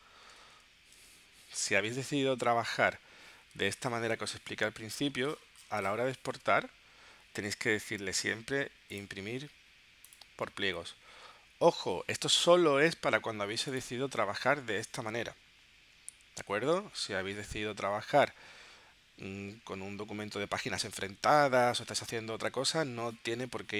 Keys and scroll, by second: 0.4 super+w, 1.0 super+Tab.